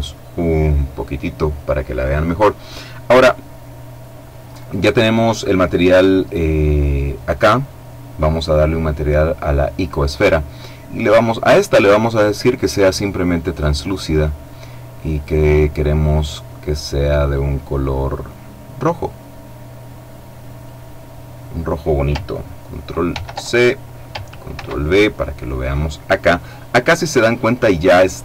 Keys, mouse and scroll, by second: 0.6-3.3 scroll up 1, 4.1 right click, 8.5 click, 10.6 click, 13.4 click, 14.7 click, 17.9-20.8 drag, 22.8 ctrl+c, 24.2 ctrl+v.